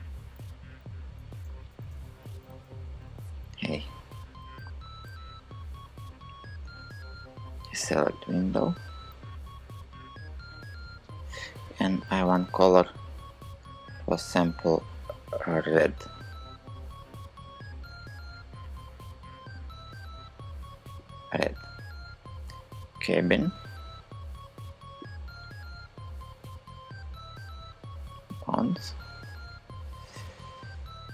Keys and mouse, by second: 1.1 shift+super+z, 1.4 shift+super+z, 1.5 shift+super+z, 1.7 shift+super+z, 1.9 shift+super+z, 2.1 shift+super+z, 2.9 click, 4.3 super+z, 5.3 shift+click, 12.0 g, 23.3-27.3 middle drag, 27.3-28.3 drag.